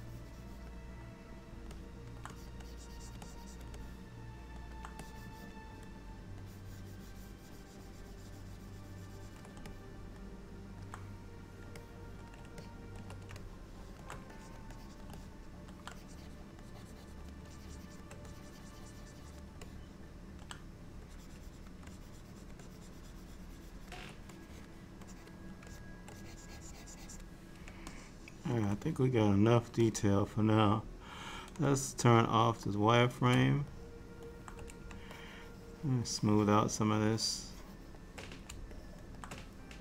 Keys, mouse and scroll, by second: 1.8 middle click, 2.4 click, 2.7 click, 3.3 click, 3.9 middle click, 5.1 click, 6.5 ctrl+click, 9.8 middle click, 11.9 middle click, 12.7 ctrl+middle click, 13.1 ctrl+middle click, 13.5 shift+middle click, 13.8 shift+middle click, 14.4 click, 15.1 click, 15.2 middle click, 16.0 click, 16.7 click, 17.6 shift+click, 18.1 shift+click, 18.4 click, 19.7 middle click, 21.2 click, 22.0 ctrl+click, 22.7 ctrl+click, 23.6 ctrl+click, 24.4 click, 25.1 click, 25.8 shift+click, 26.1 shift+click, 26.2 click, 26.3 click, 27.9 shift+middle click, 30.0 click, 31.7 click, 33.8 shift+middle click, 35.2 shift+click, 36.0 shift+click, 38.8 shift+middle click.